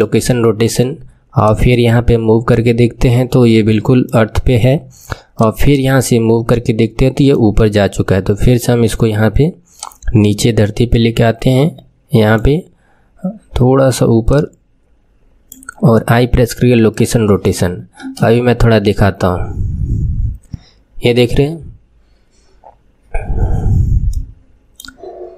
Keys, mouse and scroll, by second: 1.4-12.7 drag, 14.2 click, 15.8 i, 18.0 space, 23.1-23.7 scroll down 6, 24.1-25.3 middle drag.